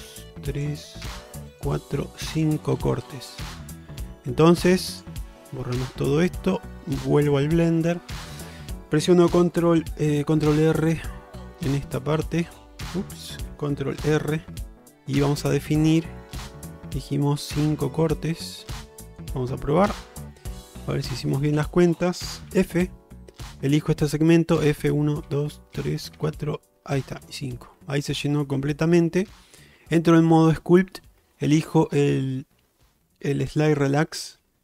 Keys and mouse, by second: 14.0 ctrl+r, 20.8 click, 22.6 f, 23.6 click, 24.6-27.2 typing, 28.2 alt+middle click, 30.2 ctrl+Tab.